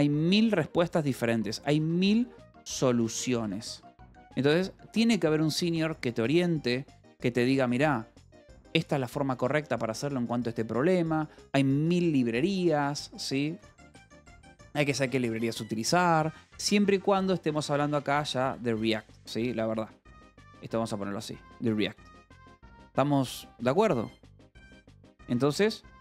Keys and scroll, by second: 0.0-3.9 typing, 12.6-14.8 typing, 16.1-17.6 typing, 18.6-20.7 typing, 21.7 j, 23.5 k, 24.6 j.